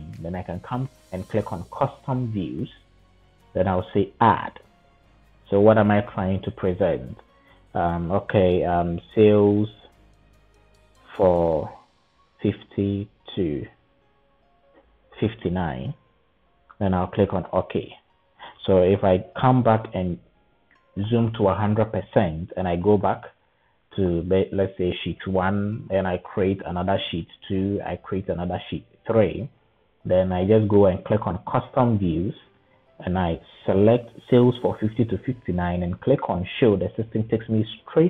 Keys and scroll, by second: 8.7-13.3 typing, 14.8-15.5 typing.